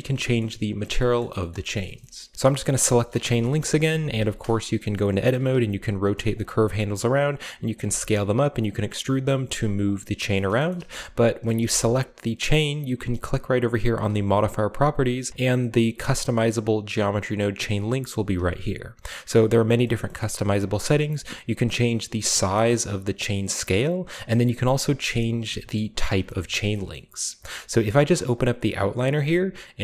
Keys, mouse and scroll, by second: 0.4-1.0 middle drag, 0.7 a, 1.2 middle drag, 1.2-2.3 scroll down 1, 1.5 middle click, 1.9 shift+middle click, 2.3 right click, 2.3 g, 2.9-3.3 shift+middle drag, 3.1 Tab, 4.0 g, 4.1 g, 5.4 r, 6.3 click, 6.5 s, 7.6 click, 7.9 g, 8.5 click, 9.0 middle click, 9.0-9.6 scroll down 1, 9.3 g, 9.8 click, 10.3 shift+middle click, 10.7-11.3 shift+scroll up 1, 10.9 Tab, 11.6 g, 14.0-15.3 drag, 19.3-21.0 shift+middle drag, 19.5-20.4 shift+scroll up 1, 21.1 shift+click, 21.9-25.4 shift+middle drag, 25.6-28.3 shift+middle drag, 26.1-27.0 shift+scroll down 2, 28.3-29.8 drag, 29.3-29.8 middle drag.